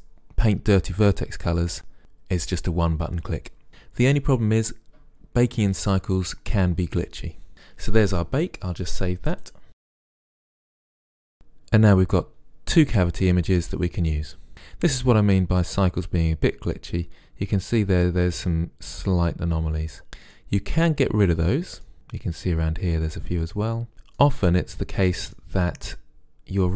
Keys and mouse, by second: 9.7 drag, 14.2 middle click, 16.9-18.9 middle drag, 19.8-22.8 middle drag.